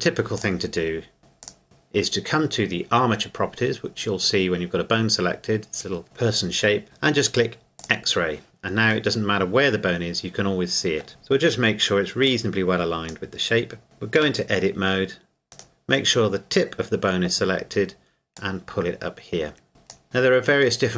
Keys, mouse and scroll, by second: 0.4 click, 1.4 click, 7.8 click, 9.1 middle click, 11.1 KP_1, 11.4 scroll up 1, 12.3 click, 14.2 Tab, 15.5 right click, 18.4 click, 20.8 middle click.